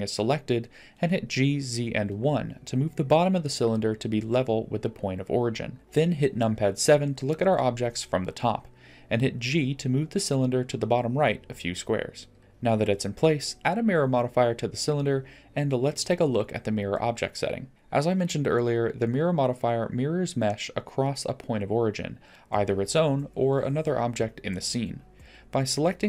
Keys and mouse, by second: 0.0 Tab, 0.9 g, 4.2-5.7 middle drag, 6.9 Tab, 8.7 KP_7, 10.8 g, 12.4 middle click, 15.2-16.3 drag, 25.7 click.